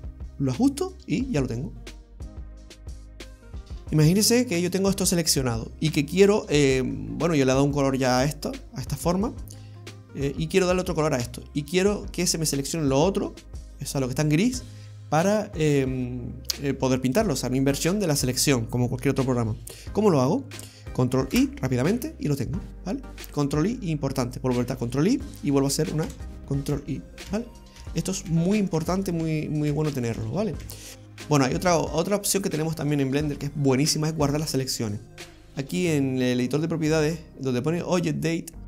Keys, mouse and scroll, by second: 21.3 ctrl+i, 22.8-23.3 scroll up 1, 23.3-23.7 scroll up 3, 23.7-24.7 scroll down 2, 26.0 ctrl+i, 26.8 ctrl+i, 27.3 ctrl+i, 27.8 ctrl+i, 28.3 ctrl+i, 28.8 ctrl+i, 29.2 ctrl+i, 29.7 ctrl+i, 30.1 ctrl+i, 30.6 ctrl+i, 30.9 ctrl+z, 30.9 click, 30.9-34.2 scroll down 1.